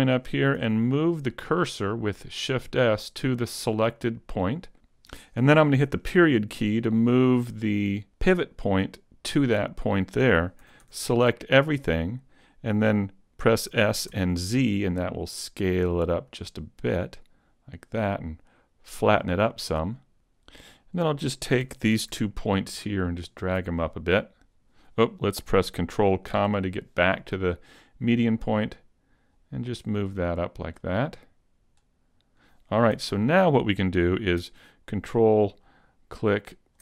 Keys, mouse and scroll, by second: 0.6 shift+s, 6.4 ., 10.7 a, 10.9 a, 13.7 s, 19.1 click, 20.1 a, 20.1 ., 20.8 right click, 21.7 a, 22.5 ctrl+click, 23.5 ctrl+click, 26.3 ctrl+,, 28.0 click, 30.3 click, 33.0 a, 34.9 ctrl+click, 36.2 ctrl+click.